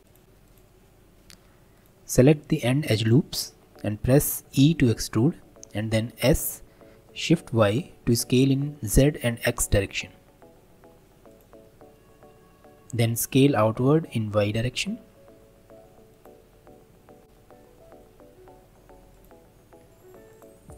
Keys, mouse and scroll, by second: 0.0 n, 0.1 click, 0.4 click, 1.8-2.8 alt+drag, 3.0 alt+shift+click, 4.5 e, 11.6-13.0 middle drag, 13.0 s, 17.2 ctrl+b, 19.8 Tab, 20.3-20.7 right drag.